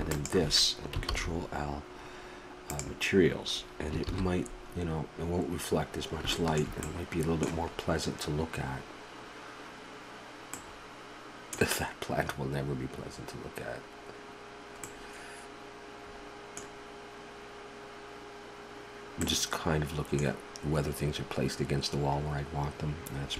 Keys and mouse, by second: 0.1-3.1 drag, 1.1 ctrl+l, 4.4 shift+z, 10.8-19.4 middle drag.